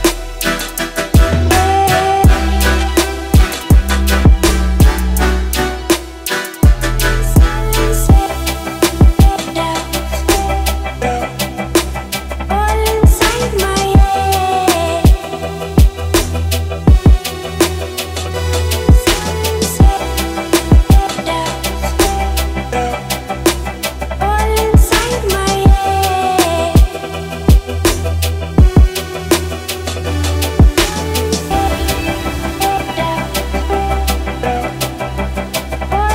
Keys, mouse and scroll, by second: 2.5 ctrl+v, 3.3 click, 8.0 p, 9.3 click, 11.6-16.5 drag, 23.9-26.1 drag, 29.2-30.8 scroll down 2, 30.8-35.1 drag, 35.3 ctrl+space, 35.8-36.1 typing.